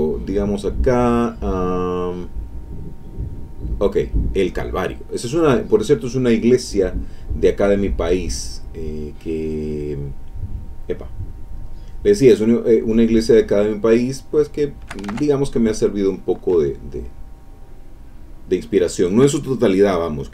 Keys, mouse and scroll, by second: 3.5 click, 4.8 click, 7.0 click, 8.4 click, 11.6 click, 12.7 click, 14.1 shift+click, 15.1 ctrl+shift+z, 15.9-19.3 drag.